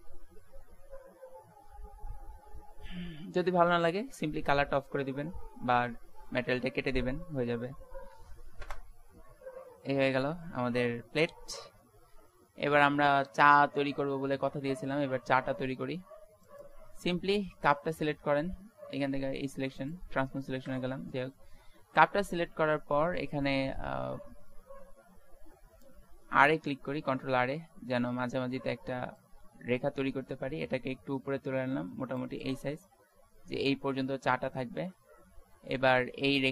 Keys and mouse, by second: 8.7 KP_0, 13.1 z, 13.5 z, 14.2 Tab, 16.8 click, 20.6 click, 21.8 Tab, 23.0 middle click, 27.0 ctrl+r, 33.0 Tab, 33.9 Tab.